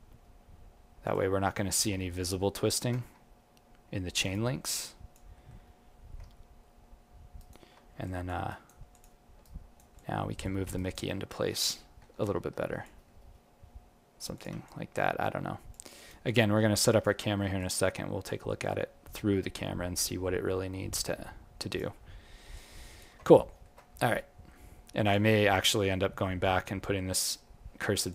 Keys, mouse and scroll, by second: 2.7 ctrl+t, 2.7 ctrl+click, 4.7 alt+click, 5.3 alt+middle click, 6.2 g, 8.0 alt+click, 8.5 right click, 8.9 click, 9.4 alt+right click, 9.9 alt+click, 10.7 alt+right click, 11.0 alt+middle click, 12.2 alt+click, 13.1 g, 14.6 alt+click, 15.9 alt+right click, 16.2 alt+click, 17.2 alt+middle click, 17.6 alt+click, 18.4 alt+middle click, 19.2 g, 22.2-22.5 scroll down 11, 22.5 alt+click, 23.2 ctrl+middle click, 23.5 ctrl+middle click, 24.0-25.0 scroll up 1, 25.0 click, 25.0 scroll up 4, 28.0 alt+click.